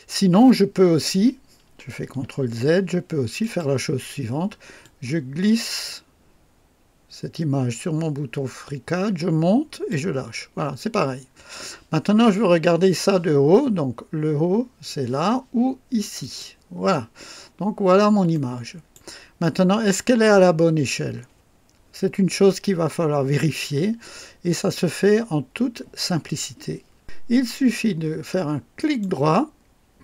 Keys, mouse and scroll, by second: 2.2 ctrl+w, 2.2 ctrl+z, 3.4 click, 4.8-10.1 drag, 16.2 click, 17.1 scroll up 3, 17.7 scroll down 1, 18.3-19.1 right drag, 19.5 scroll up 1, 28.8 right click.